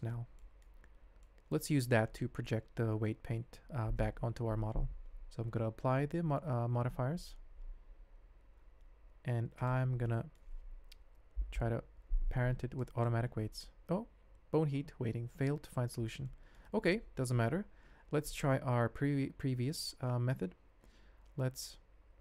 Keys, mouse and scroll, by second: 0.3 ctrl+middle click, 0.8 shift+z, 1.2 middle click, 6.0 ctrl+a, 6.8 ctrl+a, 9.6 shift+click, 10.0-10.3 drag, 11.3 ctrl+p, 16.2-16.6 drag, 18.9 ctrl+z, 19.9 ctrl+z, 21.8 g.